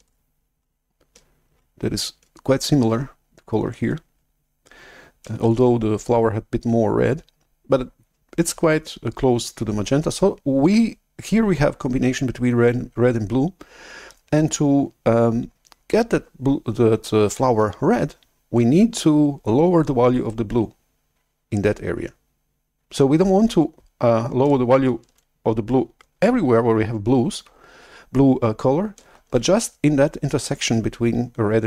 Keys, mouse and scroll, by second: 5.4 shift+F11, 29.1 shift+super+F11.